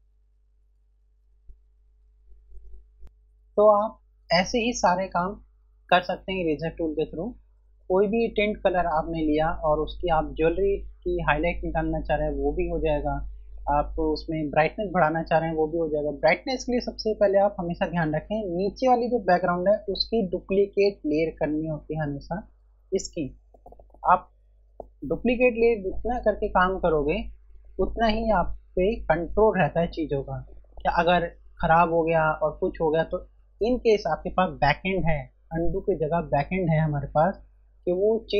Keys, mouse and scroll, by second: 3.0 space, 21.6 F1.